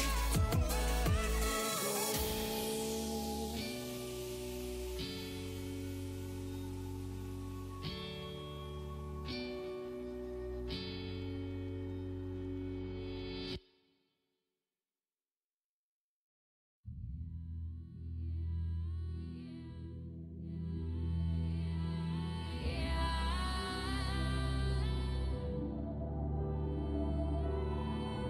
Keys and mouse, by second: 3.4-5.3 right drag, 3.5 z, 4.1-9.3 drag, 5.7-11.2 right drag, 9.3 g, 14.9 v, 18.6 x, 21.8 Tab, 21.8 click, 25.3 Tab.